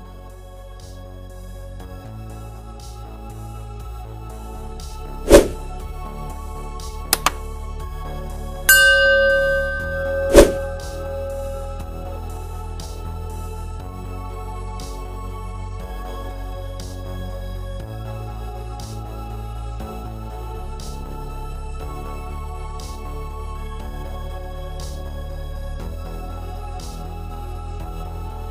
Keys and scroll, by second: 19.9 4, 21.1 5, 26.8-27.8 typing.